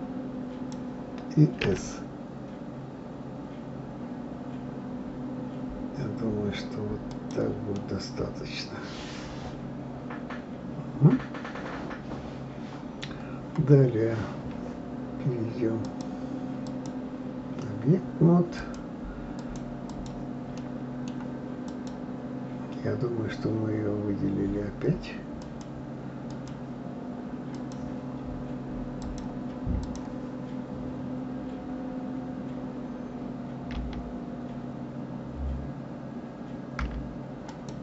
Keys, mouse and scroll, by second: 1.6 s, 7.7-10.7 middle drag, 15.8-18.7 drag, 19.4 click, 19.9 click, 20.6-21.7 middle drag, 21.7 click, 25.4 click, 26.3 click, 27.5 click, 29.0-32.0 drag.